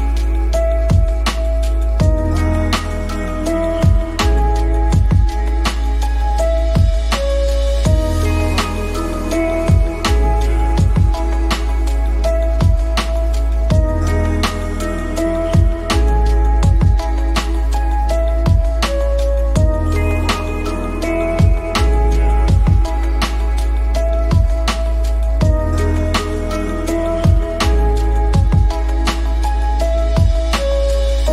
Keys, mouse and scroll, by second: 0.8 click, 1.3 shift+click, 1.7 shift+d, 2.1 click, 2.5 r, 3.6 click, 4.4 click, 5.0 click, 5.6 middle click, 5.8 shift+middle click, 6.1 middle click, 6.6 click, 7.0 middle click, 7.1 shift+middle click, 7.4 middle drag, 7.7 KP_0, 8.7 click, 12.0 click, 12.5 KP_7, 13.3 shift+middle click, 14.7 s, 16.1 g, 18.6 KP_0, 21.7 click, 22.1 click, 25.5 click, 26.5 click, 26.7 middle click, 26.9 KP_7, 27.2 g, 29.3 middle click, 30.2 shift+middle click, 30.9 s.